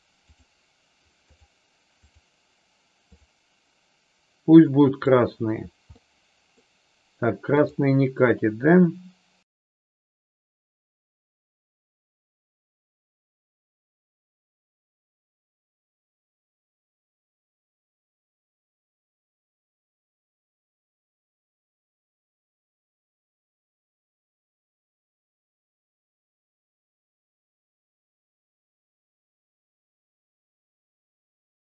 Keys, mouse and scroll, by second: 5.9-6.4 middle drag, 22.2-24.8 drag, 26.2 click, 27.2 middle click, 28.4 click, 29.8 middle click, 31.0-31.5 shift+middle drag.